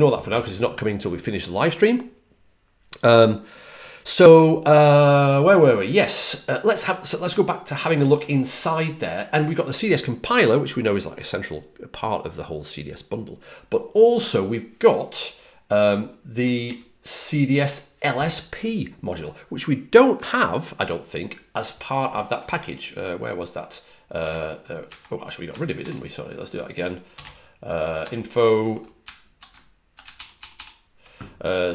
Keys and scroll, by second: 16.3-17.5 typing, 24.2 super+`, 24.8 super+`, 25.7 super+t, 27.1 k, 27.9 Return, 30.1 super+=, 30.3 super+=, 30.5 super+=.